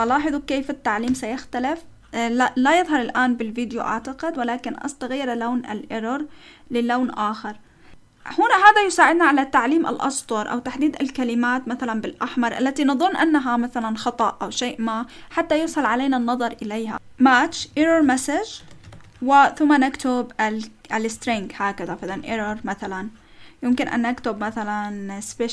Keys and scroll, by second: 0.0-0.6 typing, 1.1 Return, 16.9-19.7 typing, 21.1-23.7 typing, 24.2 Up, 24.4 Left.